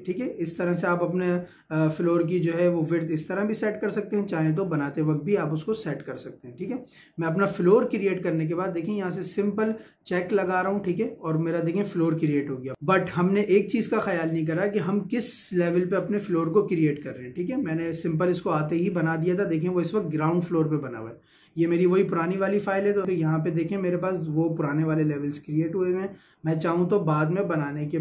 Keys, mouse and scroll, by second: 5.2 Escape, 10.4 click, 14.2 click, 23.2 click.